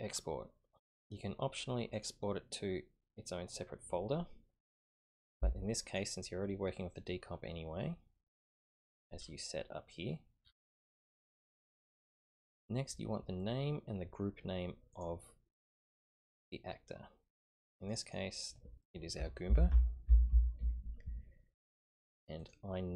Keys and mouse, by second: 1.9 click, 5.8 click, 14.9-17.9 drag, 18.0-22.5 drag, 19.6 o.